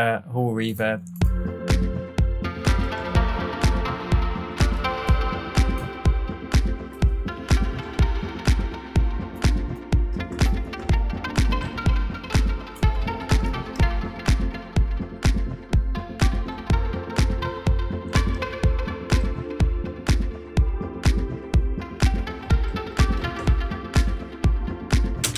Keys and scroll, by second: 25.2 space.